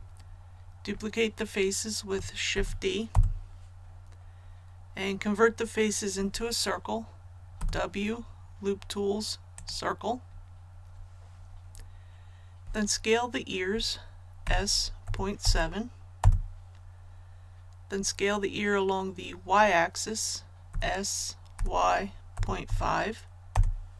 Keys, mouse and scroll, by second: 2.5 shift+d, 3.1 Return, 7.5 w, 9.5 click, 14.4 s, 15.0 KP_Decimal, 15.4 KP_7, 16.1 Return, 20.6 s, 21.5 y, 22.3 KP_Decimal, 22.6 KP_5, 23.5 Return.